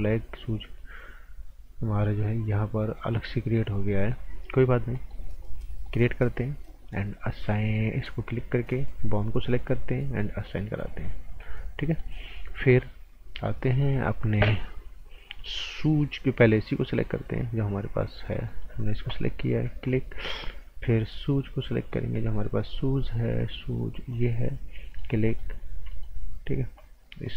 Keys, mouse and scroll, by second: 4.6 scroll up 1, 4.9 right click, 5.4 click, 8.3 click, 11.2 scroll down 1, 11.4 right click, 18.0 alt+Num_Lock, 18.5 alt+right click, 19.8 click, 24.1 click, 24.9 alt+right click, 25.9 alt+right click, 26.4-27.2 scroll up 1, 27.2 click.